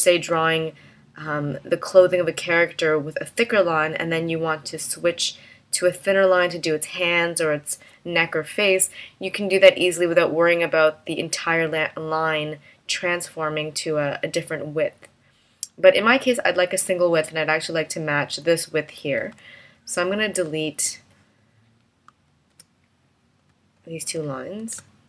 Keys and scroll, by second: 19.4 v, 22.6 BackSpace, 23.5 v, 24.8 BackSpace.